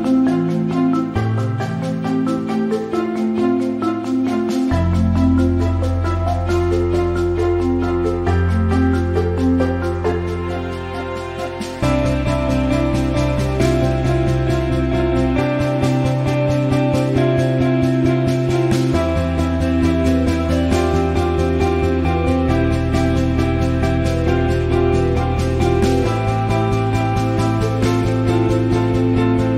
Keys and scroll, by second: 1.5 alt+shift+t, 5.1-5.8 typing, 8.5 v.